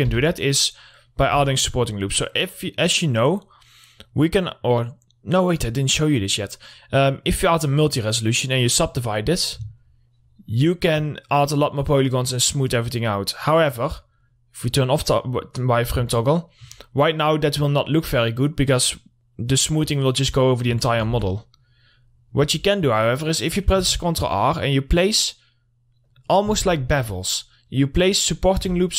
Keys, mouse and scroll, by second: 0.3 3, 0.8 click, 1.5 middle click, 1.8 Tab, 2.8 click, 7.8 click, 10.5-13.3 alt+middle drag, 15.2 click, 15.8 middle click, 16.2-16.5 scroll up 1, 16.6-18.3 alt+middle drag, 20.4 click, 21.3 alt+middle click, 21.6 Tab, 21.9 middle click, 23.0-23.4 scroll up 1, 23.6 middle click, 23.9 scroll up 1, 24.3 ctrl+r, 24.7 click, 26.9 ctrl+r, 27.2 click.